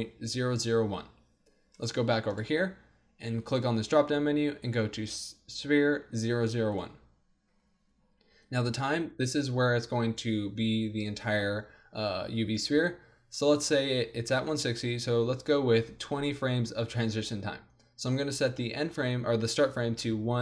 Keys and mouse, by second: 1.8-3.5 drag, 3.5-5.1 middle drag, 5.1 click, 18.5-20.4 drag.